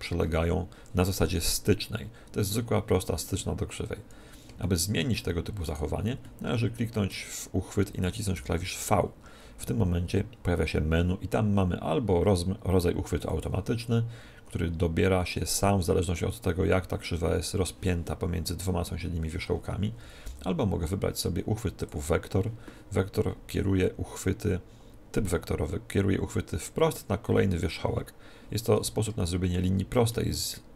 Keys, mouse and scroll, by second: 1.9 scroll up 1, 3.5-5.5 middle drag, 5.5-7.4 right drag, 7.4 middle click, 7.9 right click, 8.3 v, 20.1 v, 28.6-30.7 middle drag.